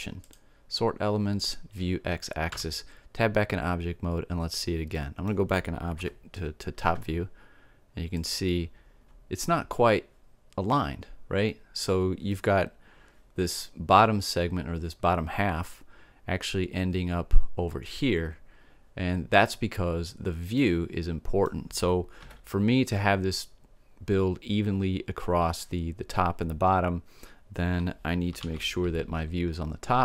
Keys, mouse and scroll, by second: 2.5 Tab, 4.9-6.9 middle drag, 6.0 KP_7, 8.1-9.9 drag, 20.5 middle click, 22.2 KP_7, 28.4 alt+a.